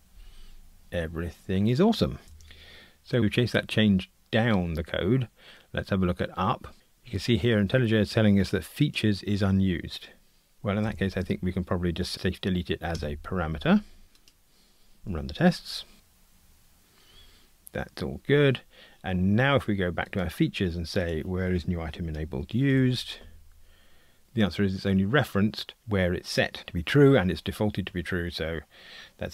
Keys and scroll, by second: 10.9 alt+Return, 15.0 ctrl+r, 22.7 super+b, 23.4 super+b.